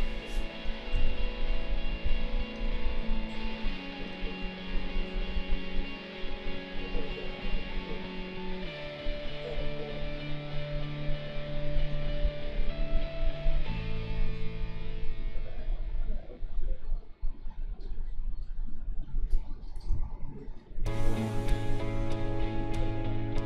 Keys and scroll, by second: 0.9 ctrl+z, 19.9 ctrl+z.